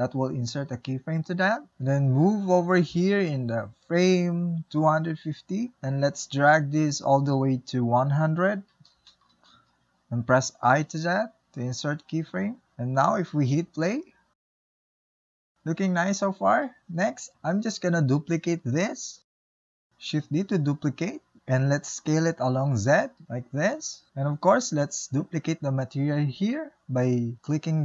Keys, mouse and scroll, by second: 0.2 i, 2.9-8.7 drag, 10.6-11.7 drag, 11.7 i, 14.5-17.1 drag, 17.1 middle click, 17.9-19.0 scroll down 2, 19.0 middle click, 19.9 click, 20.6 shift+d, 21.5 s.